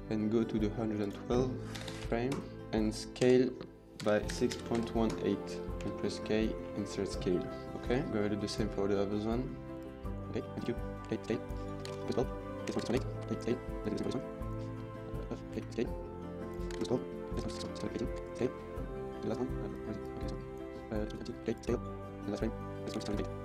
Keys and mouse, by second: 0.9-2.2 drag, 1.7 KP_1, 3.2-4.4 typing, 5.0 KP_Enter, 6.6 k, 6.8 middle click, 7.8 middle click, 8.3 click, 9.3 middle click, 9.7 click, 10.2 middle click, 10.6 click, 11.2 k, 11.5 click, 12.3 middle click, 12.6-13.4 typing, 12.9 KP_Enter, 13.6 middle click, 13.8 click, 14.2 middle click, 14.4 click, 14.7 Right, 15.1 drag, 15.7 k, 16.5 click, 17.3-18.2 typing, 17.6 KP_Enter, 18.3 middle click, 20.0 click, 21.1 click, 21.5 k, 22.8-23.4 typing, 23.1 KP_Enter.